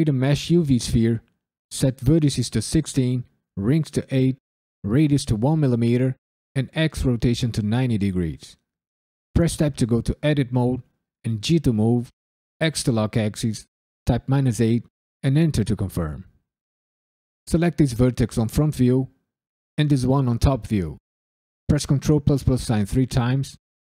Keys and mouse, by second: 1.6-7.6 drag, 9.4 Tab, 11.4 g, 12.6 x, 14.0 KP_Subtract, 14.5 KP_8, 15.2 KP_Enter, 17.3 click, 18.3 KP_7, 19.9 shift+click, 22.1 ctrl+KP_Add, 22.5 ctrl+KP_Add, 22.9 ctrl+KP_Add.